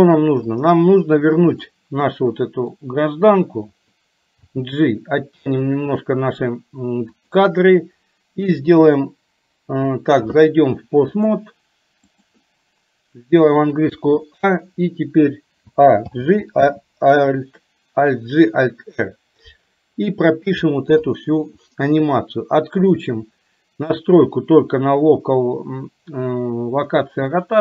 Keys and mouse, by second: 0.5-1.7 drag, 2.2 middle click, 7.4 click, 11.4-12.6 drag, 16.4 alt+g, 16.9 alt+r, 22.9-27.6 drag.